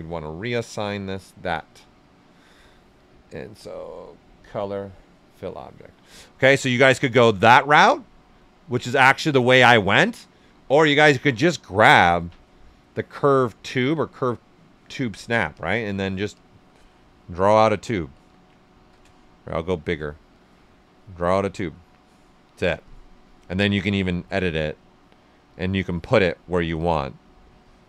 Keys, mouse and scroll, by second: 4.3 click, 6.0-8.1 right drag, 8.1-10.5 alt+right drag, 10.3-11.5 typing, 15.5-18.1 drag, 18.1 ctrl+z, 18.7 s, 18.9-20.3 drag, 20.3-23.6 drag, 23.9-25.5 drag, 25.5 click, 26.7-27.8 drag.